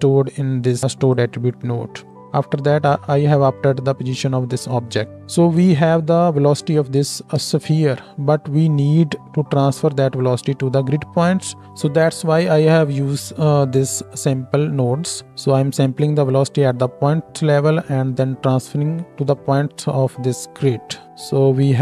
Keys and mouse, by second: 6.9-11.6 ctrl+middle drag, 7.5 ctrl+space, 11.6-21.0 drag, 21.0 Tab, 21.0 middle click.